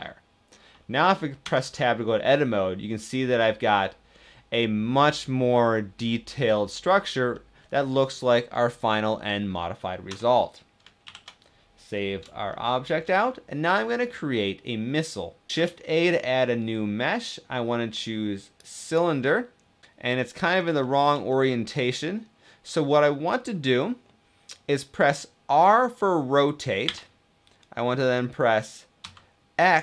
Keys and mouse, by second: 1.3 Tab, 3.5-6.6 middle drag, 7.0 middle click, 9.8 Tab, 10.8 ctrl+s, 12.2 shift+middle click, 12.6 shift+click, 13.7-14.3 drag, 15.5 shift+a, 19.8 middle click, 20.5 shift+middle click, 20.6 shift+click, 21.5 click, 26.6 r, 28.7 x.